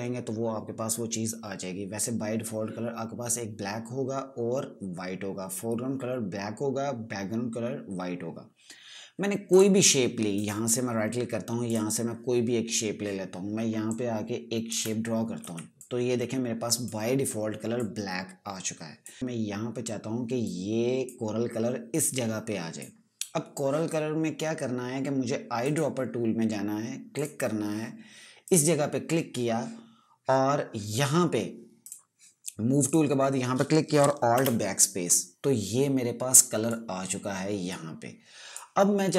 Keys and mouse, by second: 10.0 click, 10.9 right click, 12.2 click, 14.4 click, 15.9 v, 16.3 click, 20.9 click, 26.1 right click, 27.7 click, 34.5 alt+Num_Lock, 34.9 BackSpace, 37.2 click.